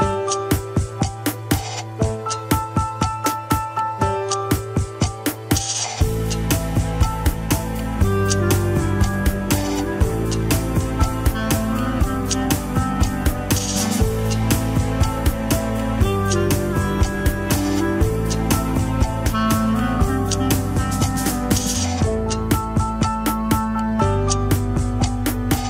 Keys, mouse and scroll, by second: 0.2-0.6 shift+drag, 1.1 shift+click, 1.6-1.9 scroll up 3, 1.9 shift+middle drag, 2.2 shift+click, 2.7 scroll down 1, 2.9 m, 4.5-4.9 shift+middle drag, 4.9 scroll up 1, 5.3 alt+z, 5.9 alt+z, 6.6 click, 7.3-8.6 middle drag, 8.6-9.2 scroll up 3, 8.7 KP_3, 9.1 shift+middle click, 9.5 click, 10.1 m, 11.5 KP_1, 12.0 click, 12.6 g, 15.3 r, 16.2 g, 18.3 ctrl+s, 18.7 ctrl+Tab, 19.9 click, 21.0 scroll down 4, 21.3-21.7 middle drag, 21.7 ctrl+Tab, 22.6 click, 22.7 KP_1, 22.9 scroll down 3, 23.2 shift+middle click, 23.5 n, 23.9-25.1 shift+middle drag, 25.1 alt+z, 25.2-25.6 middle drag.